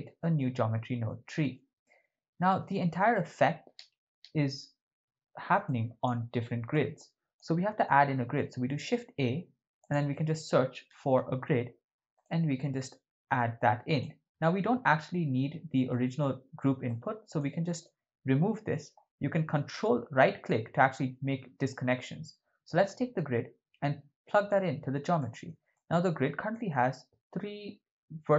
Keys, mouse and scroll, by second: 1.1 shift+middle click, 1.8 ctrl+middle click, 3.2 middle click, 5.6 click, 6.7 click, 7.8 ctrl+middle click, 8.6 shift+a, 14.4-15.5 ctrl+middle drag, 15.9-16.3 shift+middle drag, 16.9-17.4 drag, 19.8 ctrl+right click, 20.0 ctrl+right click, 23.2 click, 25.2 middle click, 25.7 ctrl+middle click, 26.5 middle click.